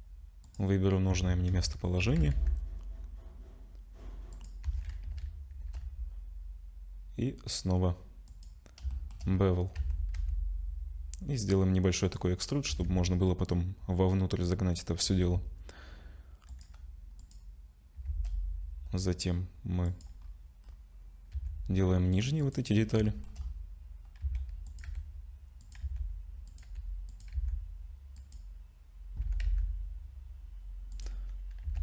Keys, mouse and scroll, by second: 0.8 scroll down 1, 1.1 Tab, 1.5 2, 2.0 g, 4.6 a, 5.5 ctrl+shift+b, 8.9 shift+middle click, 9.3-9.8 scroll up 3, 9.8 a, 10.2 e, 12.4-15.5 scroll down 4, 12.7 Tab, 15.5 scroll down 1, 16.5 click, 17.2 click, 18.1 shift+d, 20.2 scroll up 1, 20.6 scroll down 1, 20.7 scroll down 3, 21.3 s, 22.7 scroll up 3, 23.0 shift+middle click, 23.4 scroll up 1, 23.9 scroll up 1, 24.2-27.3 typing, 29.2 g, 31.6 Tab.